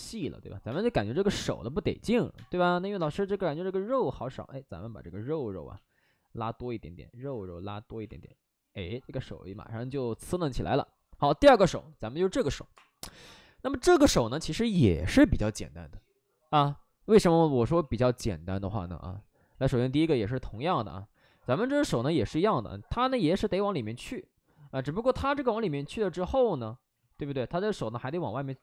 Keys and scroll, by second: 0.6 space, 2.1 3, 2.2 space, 2.9 space, 8.0 alt+s, 17.7 x, 18.9 w, 26.9 ctrl+z, 28.4 2.